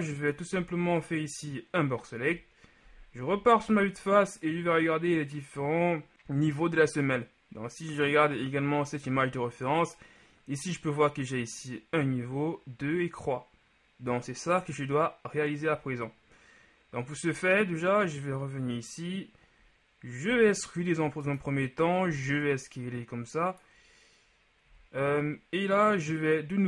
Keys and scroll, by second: 0.6 b, 2.4 KP_1, 20.5 e, 22.2 s, 24.8 z.